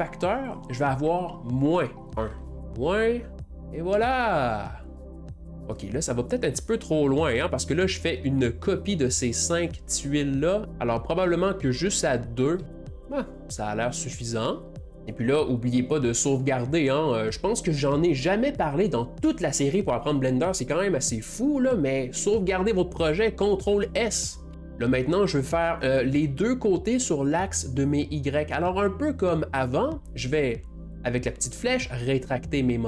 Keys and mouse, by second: 0.4-2.6 drag, 2.6 Left, 3.3 Left, 4.6-10.6 middle drag, 10.6-14.5 drag, 14.5-24.4 middle drag, 24.6 ctrl+s, 24.7-31.0 shift+middle drag, 30.9-32.8 drag, 31.1-32.8 middle drag.